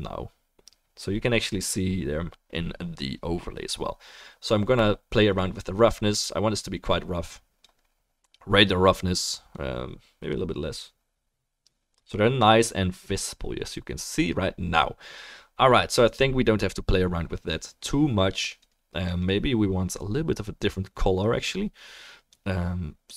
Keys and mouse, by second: 7.3 click, 7.3 middle click, 7.3 right click, 11.3-18.6 drag, 11.3-23.1 middle drag, 11.3-18.8 right drag, 19.0 click.